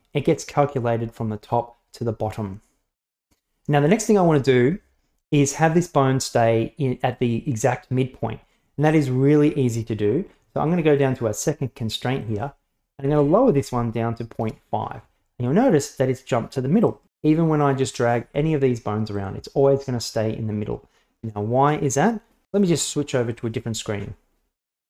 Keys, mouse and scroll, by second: 12.4-14.9 drag, 16.8 right click, 18.1 g, 19.8 right click, 20.2 g.